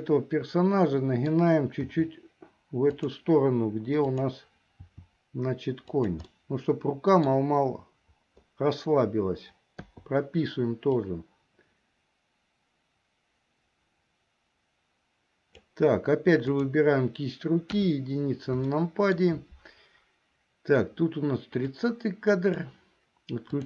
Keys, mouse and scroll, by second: 2.0 r, 4.2 click, 4.9 r, 6.4 middle click, 10.0 i, 11.2-15.9 drag, 16.7 click, 17.9 KP_1, 18.9 shift+middle click, 21.9 click.